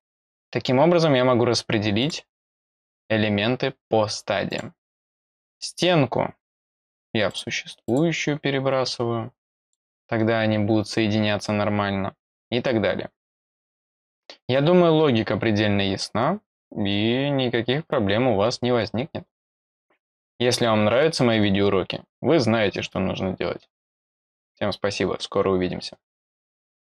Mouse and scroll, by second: 2.0 click, 2.4 scroll up 2, 4.4 click, 5.9-6.2 scroll down 2, 6.6 click, 7.2 click, 7.8 click, 9.6 click, 10.1 middle click, 10.1 scroll down 2.